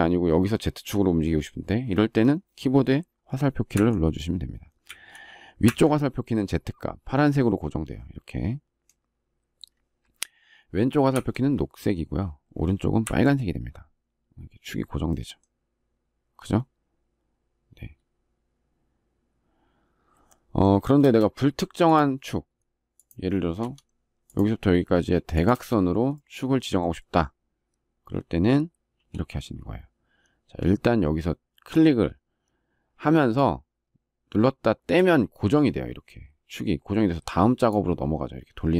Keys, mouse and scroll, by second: 20.7 space, 23.3 Escape, 25.2 space.